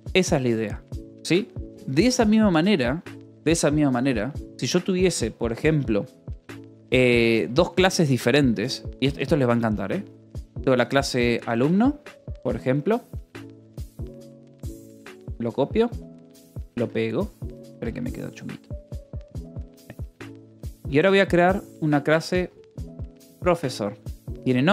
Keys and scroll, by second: 5.2 j, 6.1 j, 6.6 k, 7.7 j, 9.0-12.8 typing, 14.7-15.9 typing, 16.5 Escape, 16.9-24.7 typing.